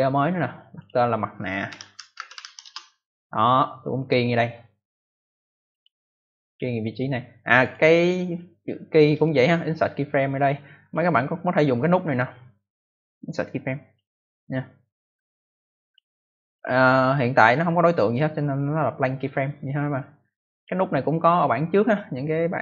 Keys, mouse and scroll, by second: 0.6 click, 1.4-2.8 typing, 4.1 click, 4.7 right click, 5.2 click, 5.6 click, 6.0 right click, 6.2 double right click, 6.8 click, 7.5 click, 8.9 right click, 10.8 click, 11.4 click, 13.8 click, 15.1 click, 16.3 click, 17.1 click, 20.2 click.